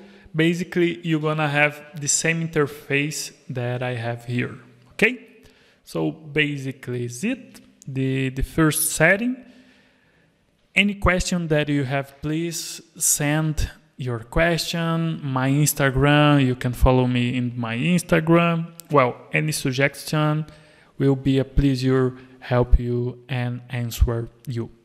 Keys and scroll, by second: 1.7 alt+a, 7.5 Escape.